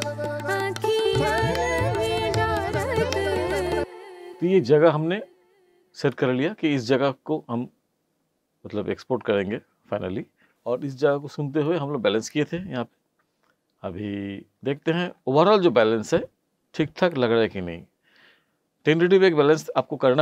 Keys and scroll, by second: 3.7 space.